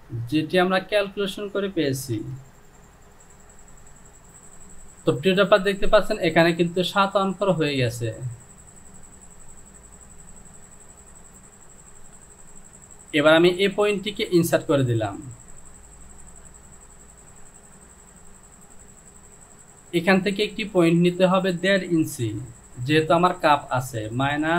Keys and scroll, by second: 2.4 Return, 16.4 Home, 24.2 KP_Subtract.